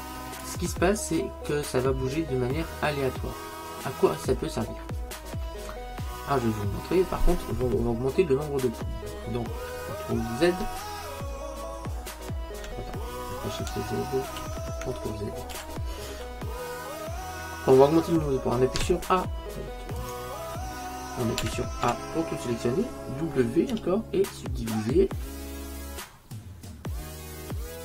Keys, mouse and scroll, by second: 1.0-3.0 middle drag, 10.9 shift+z, 14.6 shift+z, 15.6 ctrl+z, 16.8-18.8 middle drag, 19.0 z, 21.5 a, 21.9 a, 23.8 w.